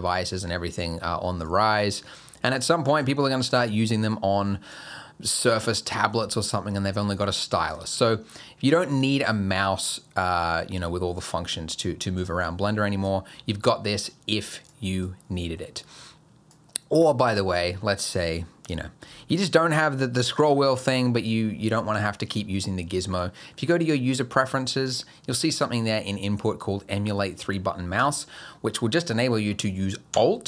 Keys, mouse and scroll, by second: 0.0 click, 1.4 click, 3.2 click, 5.4 click, 10.2 click, 12.2 click, 14.1 click, 15.0 click, 23.2 click, 29.1 click.